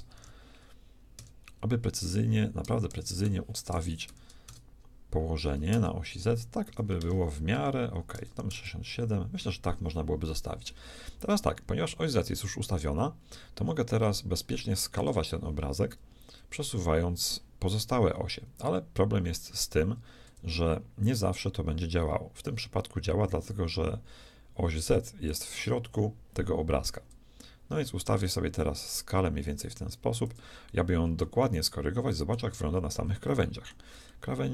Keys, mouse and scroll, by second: 2.9 Return, 5.7 Return, 11.3-14.8 middle drag, 14.9-16.5 shift+middle drag, 21.0-23.0 shift+drag, 28.6-30.5 drag, 31.5-34.5 shift+middle drag.